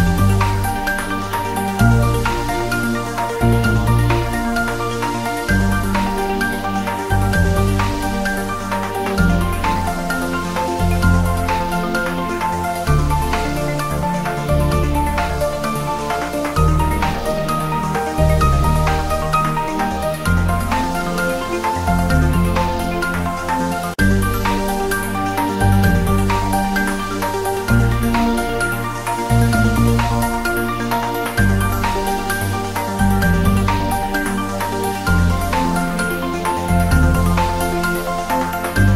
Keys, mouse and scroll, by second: 0.0 click, 1.9 click, 2.3-2.7 scroll down 1, 2.8 shift+a, 2.9-3.5 scroll down 1, 3.8 click, 3.9-4.3 scroll down 1, 4.7 click, 5.1 scroll down 1, 5.2 shift+z, 5.8 g, 6.2 click, 6.4 shift+z, 7.0 Tab, 8.4 Tab, 9.0 1, 9.2 e, 9.9 Tab, 10.2-10.6 scroll up 1, 10.6 1, 11.0 e, 12.5 click, 13.1-13.5 scroll down 1, 13.5 Tab, 14.7 s, 16.0 click, 16.1 s, 16.7 click, 17.7 s, 18.0 click, 18.4 g, 19.1 click, 19.3 3, 19.9 s, 21.2 click, 21.3 s, 22.0 click, 22.3 g, 23.1 click, 23.7-24.0 scroll down 1, 24.0 r, 24.2 click, 24.7 g, 25.3 click, 25.6 r, 26.1 click, 26.3 s, 27.1 click, 27.6-28.0 scroll up 1, 28.0 click, 28.7 g, 29.1 click, 29.3 e, 30.0 click, 30.2 g, 32.1 click, 32.3 scroll down 1, 32.7 ctrl+s, 33.6 click, 34.6 click, 35.8 click, 37.4 typing, 38.1 Return.